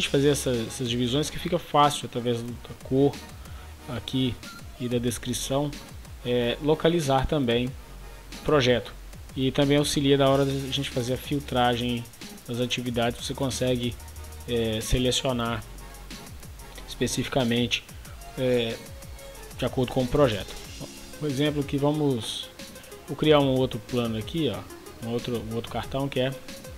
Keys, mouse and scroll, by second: 26.6-26.7 typing.